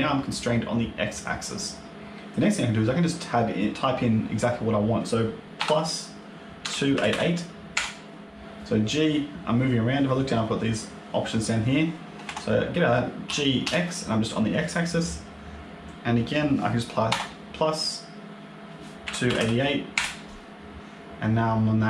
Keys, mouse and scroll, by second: 8.3 click, 8.3 g, 13.1 g.